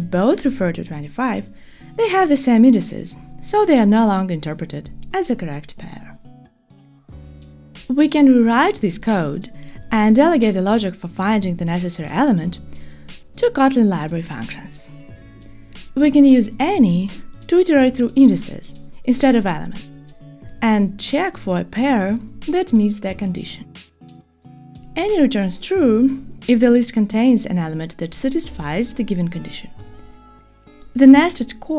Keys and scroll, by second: 7.6 alt+shift+Right, 11.3 alt+shift+Right, 12.6 alt+shift+Left, 14.6 alt+shift+Right, 19.3 alt+shift+Right, 20.8 super+BackSpace.